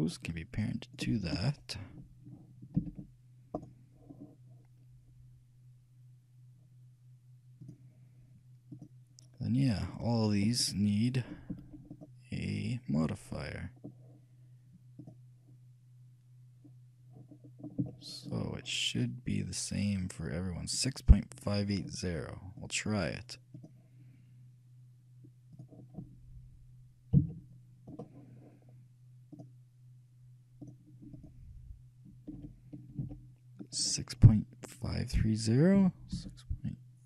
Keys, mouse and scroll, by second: 2.9 ctrl+p, 7.8-14.3 drag, 13.7-16.7 shift+middle drag, 16.7 click, 17.5-19.9 middle drag, 22.9-25.4 drag, 27.3 KP_3, 29.5-33.2 drag, 33.8-35.6 drag.